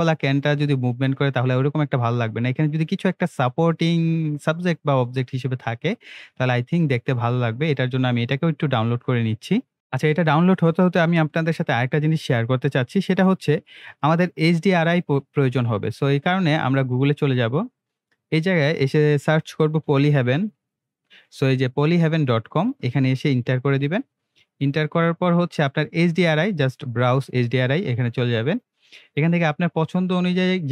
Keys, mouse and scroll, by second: 13.9 click, 16.5 click, 19.4-20.5 typing, 22.6 click, 23.4 Return, 24.6 scroll down 1, 26.9 click.